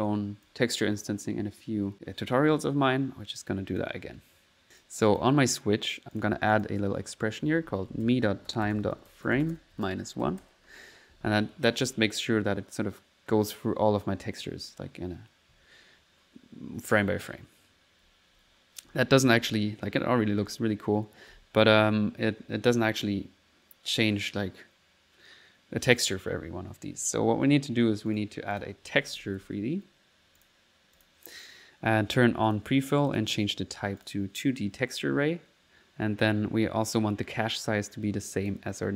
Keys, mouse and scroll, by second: 3.1 middle click, 3.4 click, 4.1 click, 6.2 click, 11.6 middle click, 11.9 1, 18.1-21.9 typing, 28.1 right click, 28.6 click, 28.8-30.0 typing, 30.4 click, 31.0 click, 32.5 click, 33.1 click, 34.0 click, 38.3 click.